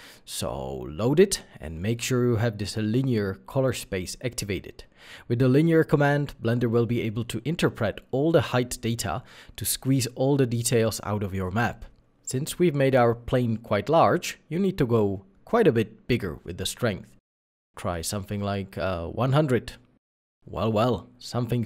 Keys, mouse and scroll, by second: 17.4 1, 17.4 0, 17.8 Return, 18.6-18.9 scroll up 1, 19.2 middle click.